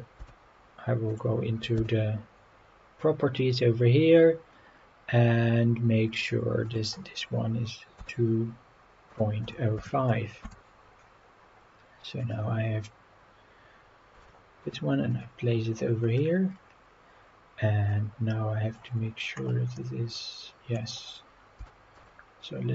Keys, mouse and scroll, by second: 0.0 click, 1.1 click, 1.8 n, 6.7-10.5 drag, 11.6 scroll up 2, 12.2 click, 14.2 g, 15.1 click, 15.5-16.5 scroll up 7, 16.6-17.6 scroll down 8, 17.9-18.8 middle drag, 18.9-19.5 scroll up 7, 19.8-20.8 middle drag, 20.9-21.2 scroll up 4, 21.6 g, 22.0 z.